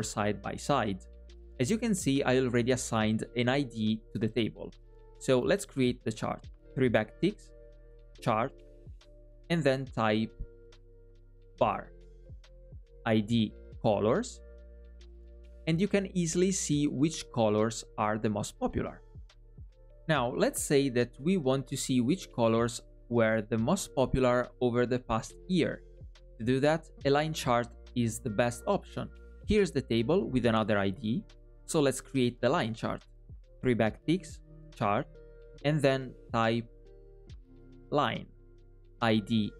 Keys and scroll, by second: 6.6 alt+\, 33.3 alt+\.